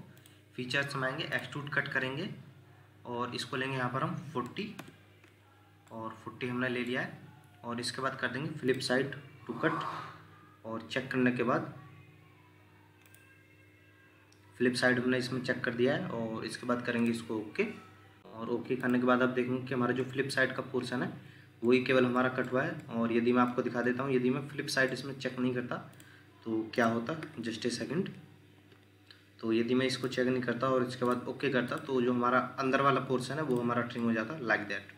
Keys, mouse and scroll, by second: 4.2-4.7 typing, 4.8 Return, 5.9 middle click, 12.6-12.9 scroll down 1, 18.2-19.0 scroll up 1, 19.0 Escape, 19.5-20.0 scroll down 2, 20.0 middle click, 21.9 middle click, 22.8 middle click, 34.0 middle click.